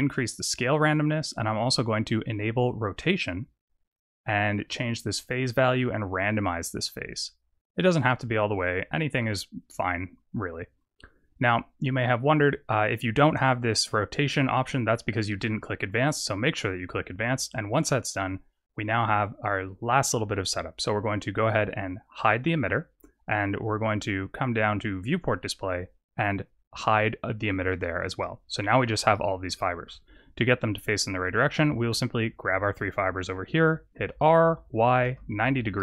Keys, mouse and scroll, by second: 2.1 click, 2.8 click, 3.9 click, 5.2 click, 10.7 click, 11.0-12.1 scroll up 8, 12.1-13.1 scroll up 4, 14.5 click, 15.4 click, 18.0-21.2 scroll down 6, 22.1 click, 23.6 click, 25.4 click, 26.7 click, 27.6 click, 28.1 middle click, 29.0-29.4 scroll down 6, 29.4 shift+middle click, 30.9 click, 33.9 r, 35.7 r.